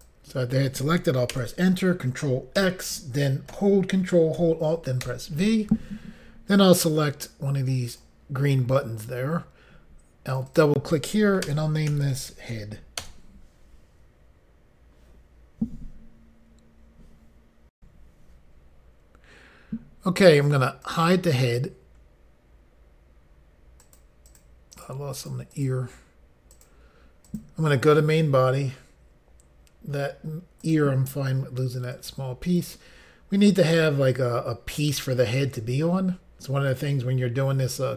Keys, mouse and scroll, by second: 1.3 Return, 2.6 ctrl+x, 5.0 ctrl+alt+v, 7.9 click, 10.3 click, 10.5 click, 11.4-12.5 typing, 13.0 Return, 17.7 Insert, 17.8 Pause, 20.8 click, 23.8 click, 24.2 click, 24.4 double click, 24.7 double click, 25.1 double click, 25.3 double click, 25.5 double click, 26.5 double click, 27.2 click, 30.6 click, 31.9 click.